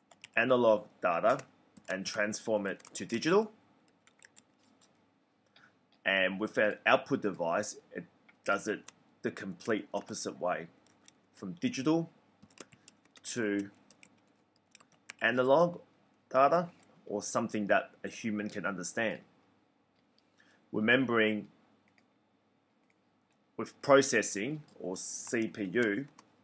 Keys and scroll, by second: 0.0-0.6 typing, 1.6-4.8 typing, 9.2-15.5 typing, 24.9-26.4 typing.